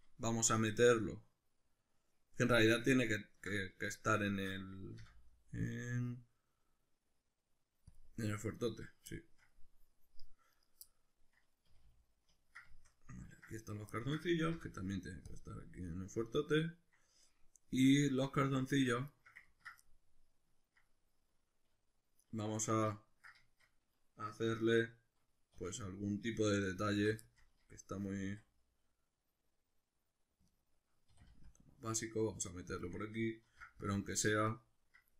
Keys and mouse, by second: 5.0 m, 10.5 right click, 10.9-13.6 middle drag, 11.7 a, 13.6 right click, 13.9-18.9 ctrl+middle drag, 14.5 m, 18.7 Tab, 19.4 ctrl+middle click, 22.8-26.8 ctrl+middle drag, 25.6 2, 26.8 alt+right click, 27.2-30.6 shift+middle drag, 28.2 s, 30.6 right click, 31.1 e, 32.9 click, 33.5 ctrl+r, 34.6 right click.